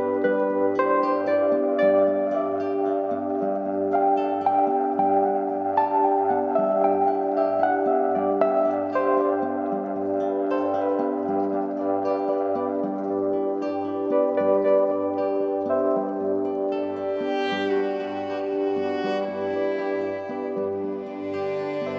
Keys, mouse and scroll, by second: 15.3-17.7 drag, 17.9 shift+click, 18.9 ctrl+g, 20.3 click.